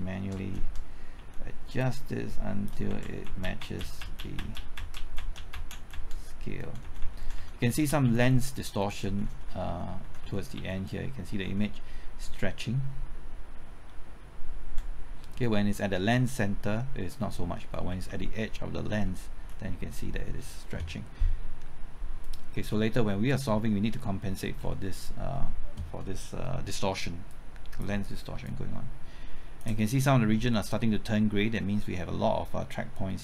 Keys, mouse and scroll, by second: 0.1 shift+Right, 0.3 shift+Left, 0.5 shift+Right, 1.1 shift+Left, 1.8 shift+click, 2.9 shift+Right, 3.0 shift+Left, 3.2-3.6 typing, 3.6 Right, 3.8 Left, 4.0 Right, 4.1 Left, 4.3 Right, 4.5 Left, 4.7 Right, 4.9 Left, 5.1 Right, 5.3 Left, 5.5 Right, 5.7 Left, 5.9 Right, 6.1 Left, 6.6 Right, 7.5 Left, 9.0 Right, 10.2 Left, 11.4 Right, 13.3 Right, 15.0 Left, 15.0 typing, 16.4 Left, 17.9 shift+Right, 17.9 Left, 19.3 shift+Right, 22.2 click, 22.6-23.1 scroll down 1, 23.3 middle click, 23.7-24.0 scroll up 1, 24.0 middle click, 24.5-24.8 scroll down 1, 24.8 middle click, 27.3-30.3 drag.